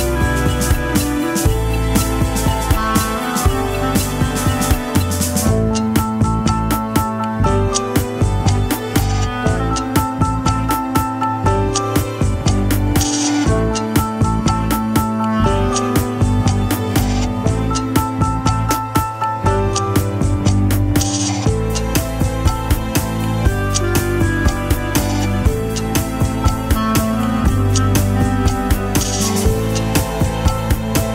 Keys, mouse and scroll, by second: 1.0 ctrl+z, 6.4 middle click, 12.2 s, 15.0 right click, 19.4 scroll up 1, 20.4 alt+click, 26.2-28.3 scroll down 1.